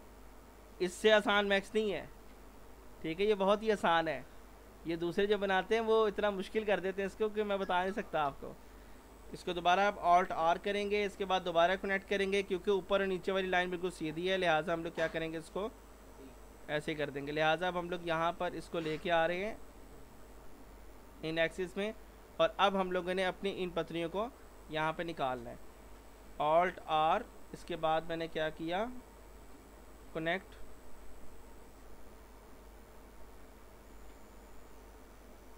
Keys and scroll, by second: 9.6 alt+r, 26.5 alt+r.